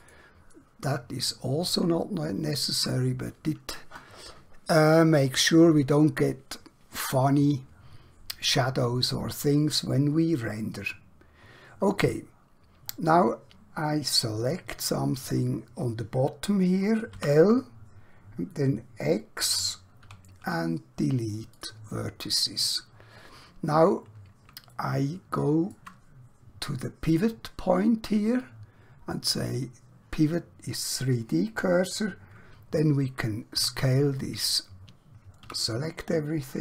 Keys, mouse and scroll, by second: 0.0 click, 0.9-1.4 scroll down 1, 1.4 scroll up 1, 2.1 shift+middle click, 10.8-11.2 scroll up 1, 11.2 scroll down 1, 12.9-13.3 scroll up 1, 14.4 click, 17.2 l, 20.1 x, 21.5 click, 22.6-23.3 scroll down 1, 23.3-24.5 scroll up 1, 24.8 shift+middle click, 27.0 click, 33.5 s, 35.5 typing.